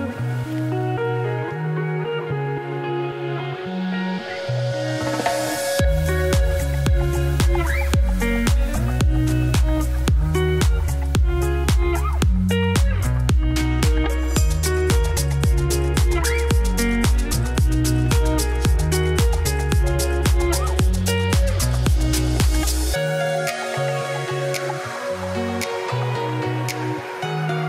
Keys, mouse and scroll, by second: 0.4 s, 2.2 s, 2.9 ., 3.5 s, 5.1 ctrl+b, 7.8 scroll up 1, 8.0 2, 8.3 alt+click, 8.8 alt+shift+click, 9.6 ctrl+b, 11.6 s, 12.6 alt+click, 13.3 s, 14.5 alt+click, 15.4 3, 15.5 alt+click, 15.7 s, 16.4 ., 17.4 s, 18.3 s, 19.7 middle click, 20.0-20.4 scroll down 4, 20.4 middle click, 20.6 click, 20.7 Tab, 20.9 Tab, 20.9 click, 21.2 Tab, 21.3 a, 21.4 s, 22.3 Tab, 22.9-24.1 middle drag, 24.9 scroll up 1, 25.1 Tab, 25.4 middle click, 25.8 3, 26.1 alt+click, 26.5 f, 26.7 middle click, 27.0 KP_7, 27.4 g.